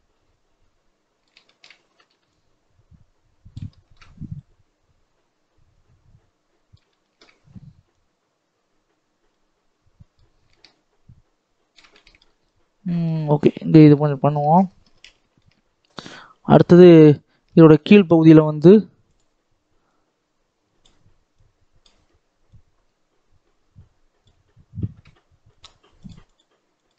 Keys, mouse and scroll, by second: 1.3 shift+middle click, 1.9 ctrl+z, 2.2-3.6 drag, 3.6 shift+middle click, 4.3-6.8 drag, 6.8-7.8 shift+middle drag, 7.8-11.9 drag, 11.9 shift+middle click, 12.3-13.9 shift+drag, 13.9-14.4 scroll down 8, 14.4-15.9 scroll up 3, 17.2 scroll up 1, 17.7 middle click, 19.1-26.9 drag.